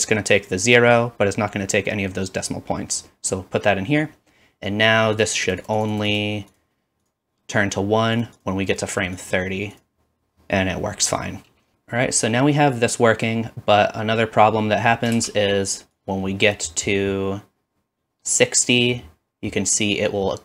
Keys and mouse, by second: 11.7 space, 15.2 space.